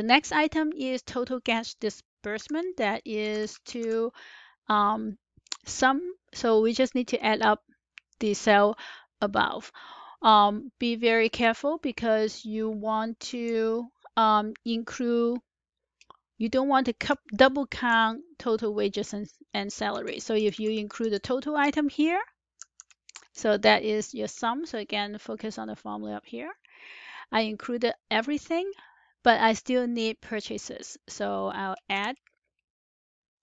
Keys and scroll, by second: 2.2 Up, 2.2-4.2 typing, 17.0 Up, 17.5 shift+Up, 19.8 shift+Up, 20.2 shift+Up, 22.5 shift+Up, 22.5 ).